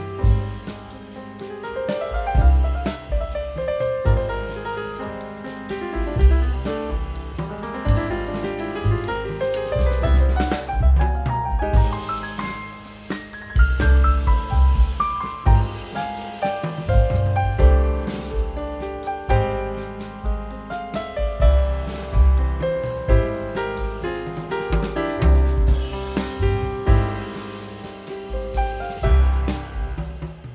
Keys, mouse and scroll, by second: 1.9 scroll down 1, 3.0 scroll up 1, 3.4-3.9 scroll down 1, 8.8 scroll up 1, 11.3 right click, 22.6 double click, 26.1 right click, 28.4-29.3 typing, 28.6 Tab, 30.0 scroll down 1, 30.4 scroll up 1.